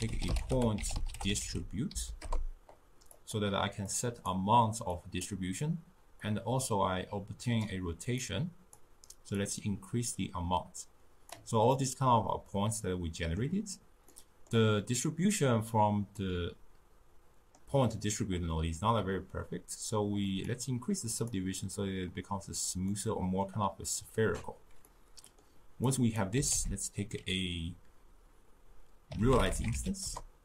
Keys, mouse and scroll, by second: 7.7-11.9 drag, 11.9-20.5 middle drag, 20.5-23.0 drag, 23.0-30.4 middle drag.